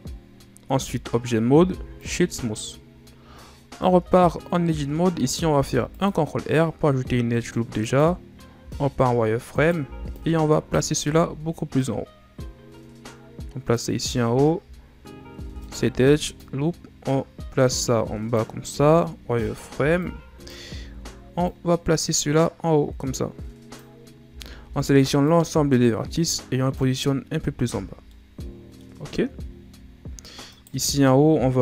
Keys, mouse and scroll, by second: 0.7 Tab, 1.5 w, 3.8 Tab, 5.5 ctrl+r, 8.6 z, 9.5 right click, 9.8 b, 11.0 z, 11.7-14.3 drag, 14.3-15.6 shift+scroll up 5, 15.6 alt+right click, 16.3-18.6 drag, 18.6 z, 19.4 right click, 19.7 b, 20.7 z, 21.4-24.2 drag, 24.2 a, 24.6 a, 25.2-27.2 drag, 27.2 Tab, 27.6 a, 27.8 scroll down 3, 28.0-29.4 middle drag, 29.4-30.5 scroll up 9, 30.5 right click, 30.7 Tab, 31.1-31.6 scroll down 3.